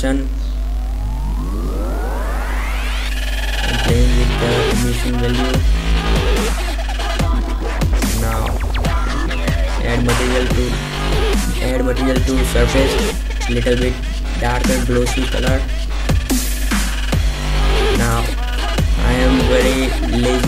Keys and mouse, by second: 0.3 shift+f, 8.9 click, 10.7-12.2 typing, 11.3 middle click, 13.4 drag, 13.5 Delete, 14.5 shift+z, 16.9 KP_0.